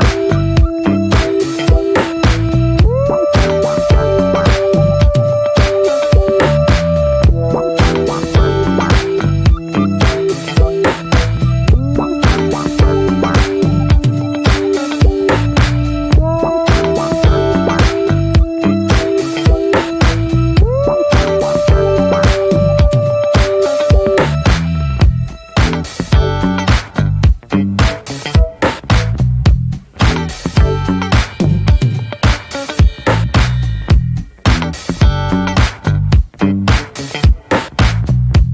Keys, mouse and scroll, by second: 3.2-3.7 scroll up 2, 3.7-4.1 scroll down 2, 4.4 Tab, 4.6 middle click, 4.8-5.7 scroll up 3, 6.2 shift+middle click, 6.4-6.7 scroll up 3, 6.7 shift+middle click, 6.9-7.4 scroll up 1, 7.4-9.0 shift+middle drag, 9.5 shift+d, 10.0 scroll up 2, 10.3 shift+middle click, 10.5 s, 15.9 scroll down 2, 16.1 middle click, 16.3-17.1 scroll up 3, 16.5 shift+middle drag, 17.1-17.4 drag, 17.4-18.1 middle drag, 18.1 3, 18.4 click, 18.8-19.1 middle drag, 19.1 shift+drag, 19.5-20.0 middle drag, 21.3-22.0 middle drag, 22.0 x, 23.2-23.7 middle drag, 23.7 ctrl+z, 23.9 middle click, 24.4 x, 25.3 drag, 25.7-26.0 middle drag, 26.0 ctrl+s, 26.2 scroll down 1, 26.3 alt+middle click, 26.5 alt+middle click, 26.8 scroll down 1, 27.0-27.4 shift+middle drag, 27.4 scroll down 1, 27.6 shift+middle click, 27.7 scroll up 1, 27.9 scroll down 1, 28.1-28.7 shift+middle drag, 28.7 ctrl+s, 29.1 shift+middle click, 29.3-30.9 shift+scroll up 6, 29.6 middle click, 29.9 Tab, 30.3 shift+middle click, 30.9 2, 31.5 click, 31.9 alt+shift+click, 32.7 f, 33.3 click, 33.7-34.3 middle drag, 34.3 s, 35.0 alt+middle click, 35.1 alt+middle click, 35.5-36.0 shift+middle drag, 36.0 e.